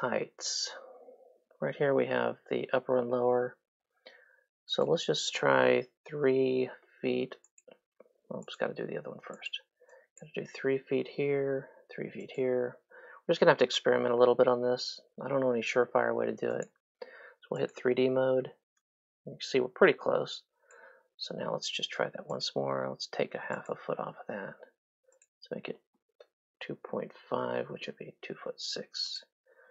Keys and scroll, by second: 6.5 KP_3, 11.1 KP_3, 13.6 KP_3, 18.3 3, 21.2 Escape, 26.7 KP_2, 26.9 KP_Decimal, 27.3 KP_5, 27.8 Return.